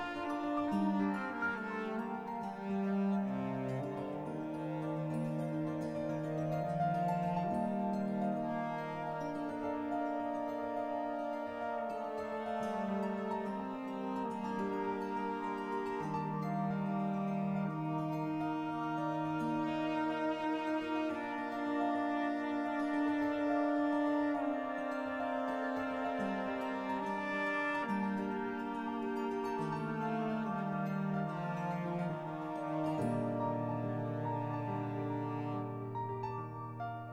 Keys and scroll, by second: 5.6 w, 6.3 3, 15.6-16.5 typing, 18.0 s, 20.1 s, 31.0 s, 37.0 3.